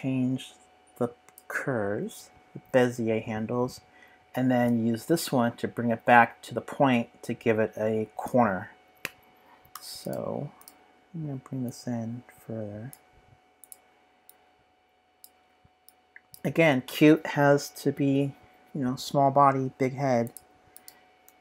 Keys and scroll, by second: 9.7 v.